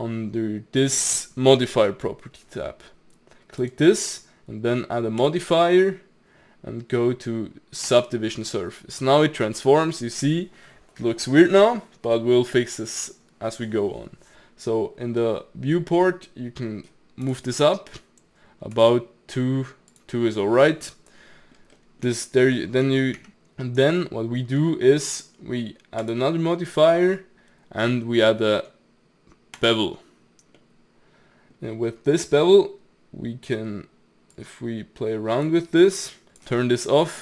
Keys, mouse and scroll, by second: 3.6 click, 5.2-8.2 drag, 8.6-11.8 middle drag, 17.2-20.3 drag, 20.3-20.6 middle drag, 20.6 scroll up 2, 20.9-22.8 middle drag, 22.8 Tab, 23.2 Tab, 24.0-26.0 middle drag, 26.0-29.2 drag, 30.6-33.6 middle drag, 34.3-36.2 drag, 36.3 click, 36.7-37.2 middle drag.